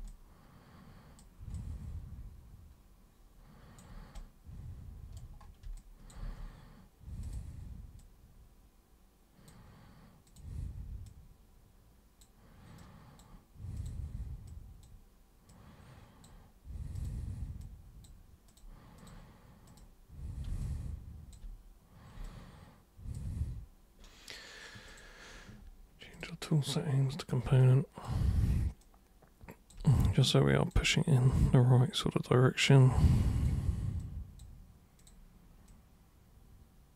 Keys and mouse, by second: 0.1-1.2 alt+super+drag, 1.5-3.8 alt+drag, 4.2-5.2 right drag, 5.8-6.1 alt+drag, 6.2 w, 7.2 click, 8.0 click, 10.2 super+click, 11.1 super+click, 12.8 super+click, 13.8 super+click, 14.5 super+click, 15.5 super+click, 17.0 super+click, 17.6 super+click, 18.5 super+click, 19.0 super+click, 19.7 super+click, 20.6 alt+super+click, 22.3 alt+super+click, 24.9 super+click, 26.1 super+click, 27.2 super+click, 27.6 alt+super+click, 28.8 super+click, 29.9 alt+super+click, 31.3 super+click, 32.1 super+click, 33.4 super+click, 34.0 super+click, 35.0 super+click, 35.7 super+click.